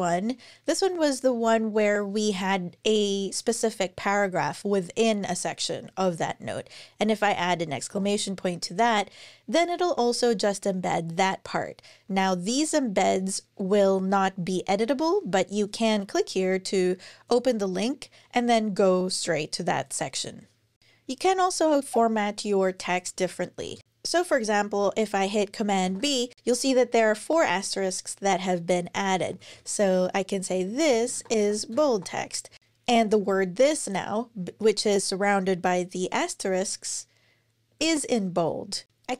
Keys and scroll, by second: 7.7 shift+1, 23.4 Return, 23.5 Return, 25.6 super+b, 28.7-32.8 typing, 30.3 super+Right, 32.9 super+Left, 37.6 super+Right.